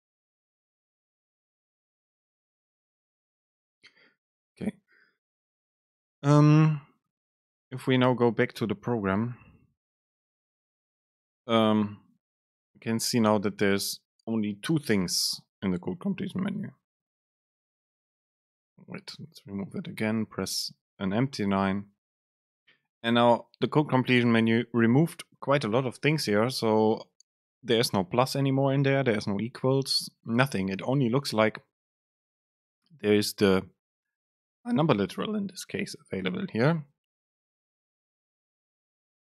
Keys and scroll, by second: 10.4 super+space, 19.2 BackSpace, 19.8 Return, 20.2 super+space.